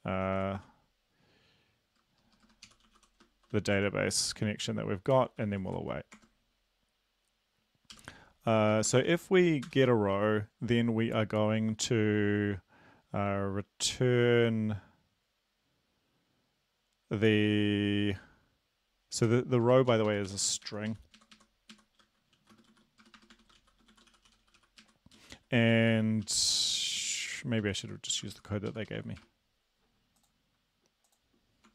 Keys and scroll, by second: 0.3-0.6 typing, 2.1-3.3 typing, 3.8 Tab, 4.2 Right, 5.6 typing, 6.2 Tab, 7.9 ;, 8.8 BackSpace, 8.9 space, 9.1 {, 9.7 Return, 19.4 r, 19.9 Up, 20.1 Up, 20.3 Right, 20.9 Right, 21.2 Right, 21.4 Right, 21.7 Right, 22.3-26.2 typing, 26.3 ctrl+shift+Left, 27.0 Right, 27.6 ctrl+Right, 28.1 Left, 28.7 shift+Left, 28.9 shift+Left, 29.2 BackSpace.